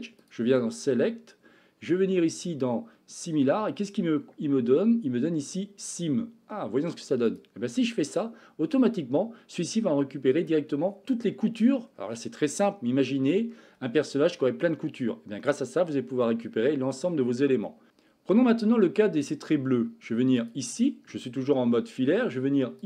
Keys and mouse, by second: 0.1-7.4 drag, 7.9-10.4 middle drag, 15.4-16.5 middle drag, 17.6 middle click, 20.3 click.